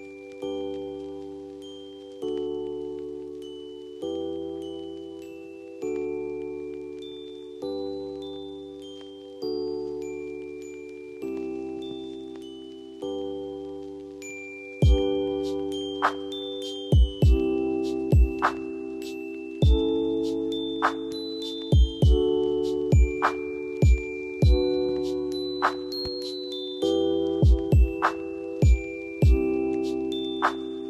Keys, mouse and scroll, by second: 3.8 ctrl+t, 14.5 alt+click, 20.5 ctrl+a, 23.1 ctrl+d.